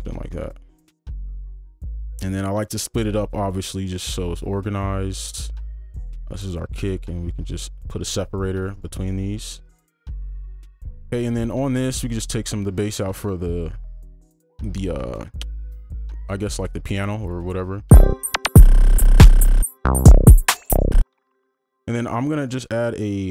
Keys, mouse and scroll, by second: 1.8-6.5 scroll up 1, 6.5 right click, 8.7 right click, 12.4 double click, 17.9 space, 21.0 space.